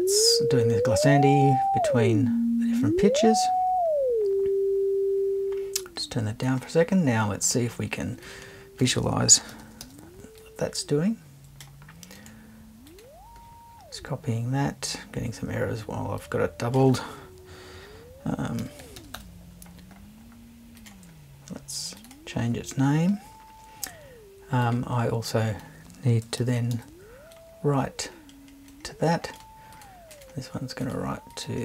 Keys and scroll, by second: 9.5 super+c, 9.8 super+v, 18.6 l, 19.0 n, 26.4 super+c, 26.7 super+v.